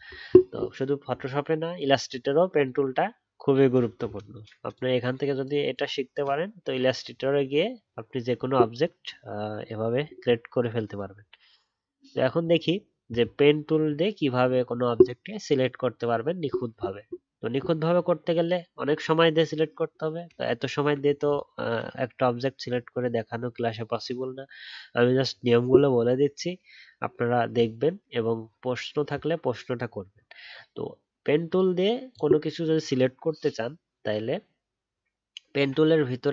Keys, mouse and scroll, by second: 20.5 alt+scroll up 2.